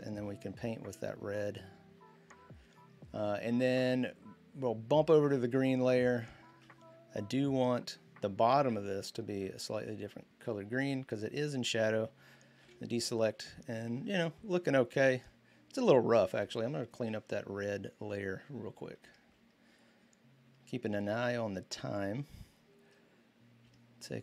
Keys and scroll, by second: 0.6 typing, 5.7 typing, 12.4 ctrl+d, 16.1 b, 17.3 typing, 19.2 typing, 23.2-24.1 typing.